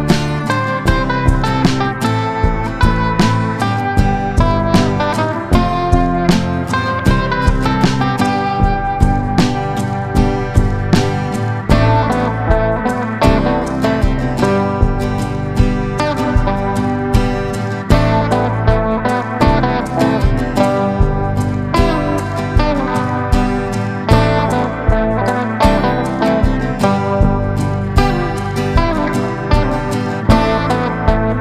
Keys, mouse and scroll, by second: 0.1 ctrl+scroll, 1.2-19.2 drag, 19.8 click, 20.6-21.1 scroll up 1, 28.8-31.4 drag.